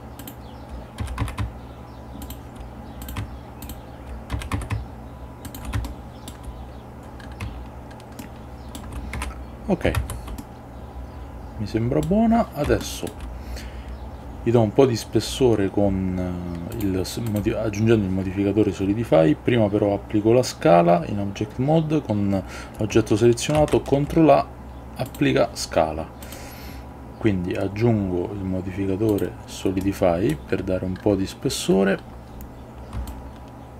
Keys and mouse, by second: 0.3 shift+click, 1.1 s, 1.3 x, 2.3 shift+click, 3.1 click, 3.7 shift+click, 4.4 s, 4.6 x, 5.6 shift+click, 6.0 shift+middle click, 8.3 shift+middle click, 9.3 Tab, 10.1 shift+z, 10.5-12.2 middle drag, 12.9 shift+middle click, 16.8 click, 23.7 ctrl+a, 26.3-29.3 drag, 29.9-30.5 middle drag, 33.2-33.7 shift+drag.